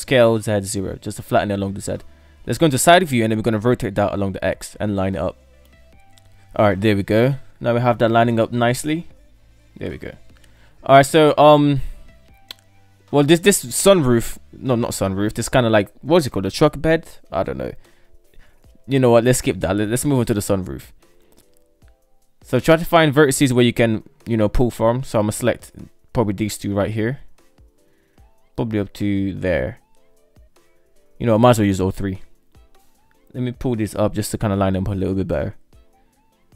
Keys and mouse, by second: 1.2 Tab, 1.4 KP_3, 2.0 Tab, 3.2 r, 5.8 middle click, 7.0 Tab, 7.4-8.9 middle drag, 9.2 shift+middle drag, 9.9 middle click, 11.4 Tab, 16.2 shift+middle click, 17.0 shift+middle drag, 19.4 Tab, 20.8 alt+z, 21.8-22.4 shift+middle drag, 23.3 shift+middle click, 24.5 right click, 25.4 shift+middle click, 27.6-28.7 shift+right drag, 29.2-31.1 shift+middle drag, 31.8 shift+middle click, 32.8 right click, 33.4 shift+right click, 34.8 g.